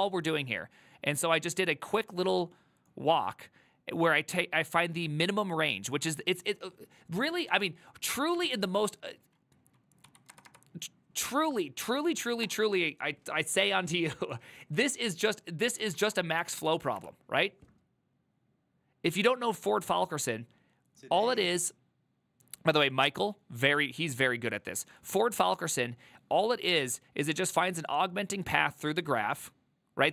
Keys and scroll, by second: 8.6 ctrl+t, 10.1-10.6 typing, 11.8-13.5 typing, 16.3-17.2 typing.